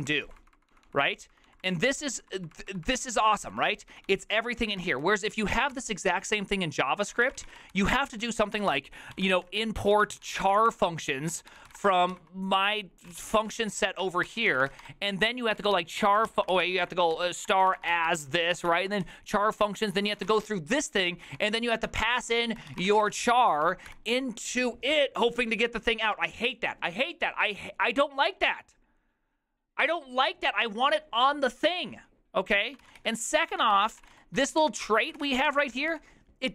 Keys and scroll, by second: 5.8 ctrl+c, 7.0-23.9 typing, 32.8-36.4 typing.